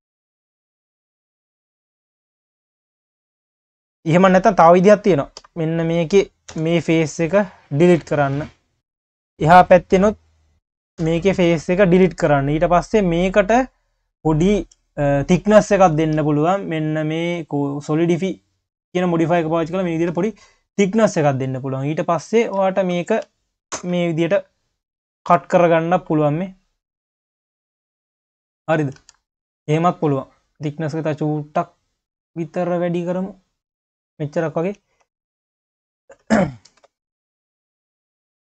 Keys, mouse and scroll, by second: 0.2 drag, 0.7 click, 2.8 q, 3.4-3.9 scroll up 1, 3.9 q, 4.2 click, 4.7 Tab, 5.4 3, 5.7 click, 6.5 Delete, 8.0 q, 8.7 q, 9.8-10.2 scroll up 2, 10.2 click, 11.0 Delete, 12.2 Tab, 13.7-16.8 drag, 19.0 q, 21.0-21.6 scroll down 2, 21.6 click, 22.2 click, 22.7 shift+click, 23.7 ctrl+KP_Add, 24.9 click, 25.5 q, 26.1 scroll up 2, 26.3 q, 28.4 ctrl+z, 29.0 ctrl+z, 30.8-33.9 drag, 34.3-34.8 scroll down 2, 34.8 q, 35.1-35.9 scroll down 1, 35.9 shift+click, 36.7 ctrl+KP_Add, 37.3 q, 38.4 click.